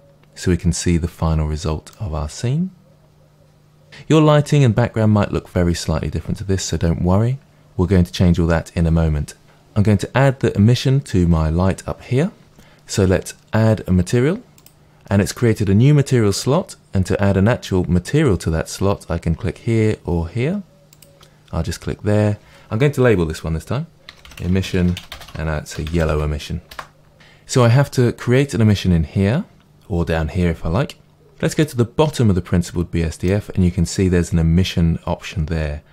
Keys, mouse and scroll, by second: 1.9-14.6 middle drag, 14.6-18.0 drag, 20.9-31.6 drag, 24.6 s, 25.8 l, 26.8 Return, 31.6-35.9 middle drag, 31.8-35.9 drag.